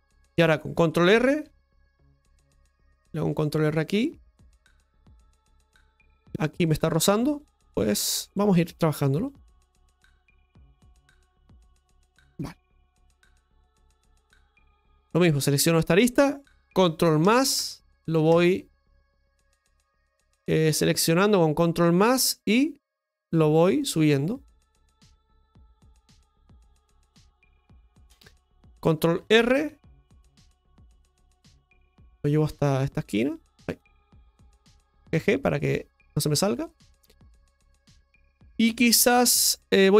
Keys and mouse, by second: 5.6 Tab, 6.1 right click, 6.7 shift+middle click, 7.4 right click, 7.5 Tab, 8.8 right click, 9.2 alt+shift+right click, 9.4 right click, 9.7 right click, 10.7-11.7 drag, 12.4 shift+middle click, 13.1-15.4 middle drag, 15.4-17.2 right drag, 17.2 ctrl+KP_Add, 20.4-22.0 middle drag, 23.2 middle click, 24.1-26.8 drag, 26.8-29.5 middle drag, 29.5 ctrl+r, 36.7 middle click, 38.0 KP_Divide, 39.1 shift+middle click.